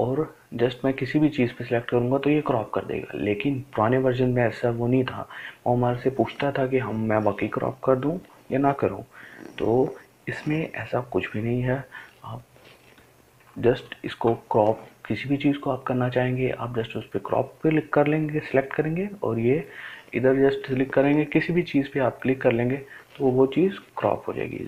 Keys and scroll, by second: 14.3 ctrl+z.